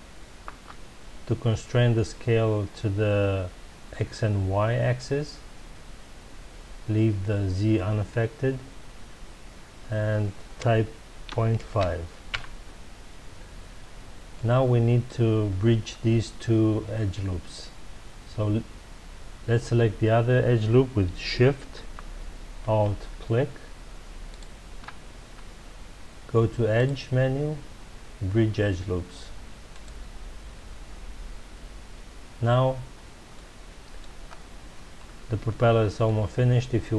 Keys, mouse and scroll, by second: 12.3 KP_Enter, 13.8 scroll down 1, 14.3-15.6 middle drag, 15.6 scroll up 1, 24.3 alt+shift+click, 26.7-29.8 drag, 31.5-32.9 scroll down 2, 32.9-33.3 scroll down 1, 33.3-34.2 middle drag, 34.2-34.6 scroll up 2, 35.4-36.9 shift+middle drag.